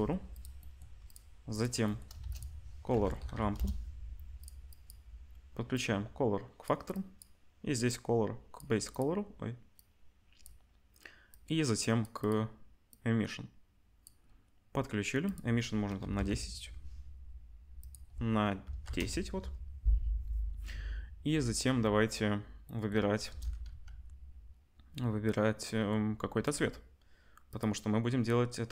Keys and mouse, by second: 0.4 middle click, 1.1 click, 1.2 middle click, 1.5 click, 1.6-4.6 middle drag, 2.2 shift+a, 4.6-8.9 drag, 8.9-9.7 middle drag, 9.7-12.3 drag, 12.3-12.9 middle drag, 12.9-16.8 drag, 16.8 middle click, 16.8 1, 16.8 0, 17.8-28.1 drag, 23.2 KP_0, 23.6 z.